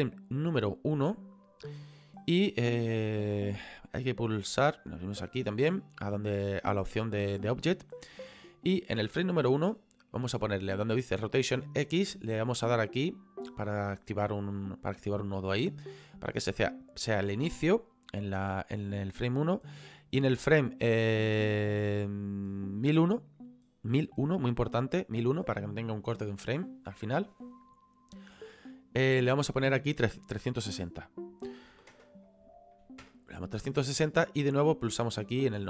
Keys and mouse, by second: 5.2 click, 14.5 click, 19.6 click, 29.5 click, 31.4 KP_3, 31.7 KP_6, 31.9 KP_0, 34.8 click.